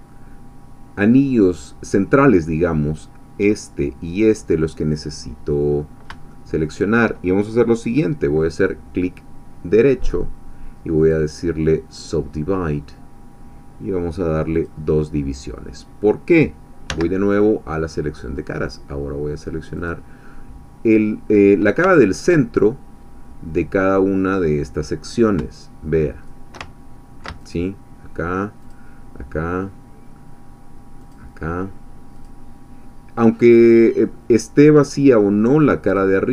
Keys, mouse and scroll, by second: 5.7 scroll up 1, 6.3-7.6 shift+middle drag, 9.9 right click, 11.0-13.6 drag, 14.5 click, 16.9 3, 19.8 click, 21.9 ctrl+middle click, 27.5 ctrl+shift+click, 28.7-31.3 shift+drag, 32.2 shift+click, 36.0-36.3 shift+drag.